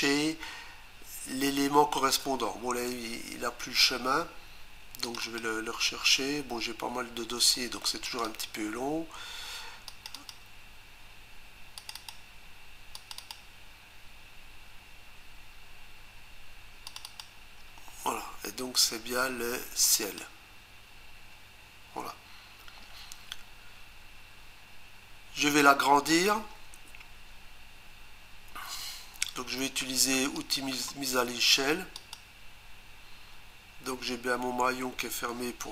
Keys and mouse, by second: 5.1 click, 5.4 double click, 8.1 click, 8.3 click, 9.9 click, 10.1 click, 10.3 double click, 11.8 click, 12.0 click, 12.1 double click, 13.0 click, 13.2 click, 13.3 double click, 16.9 click, 17.1 click, 17.2 double click, 19.8 click, 20.0 click, 20.2 double click, 30.4 click, 32.0 click.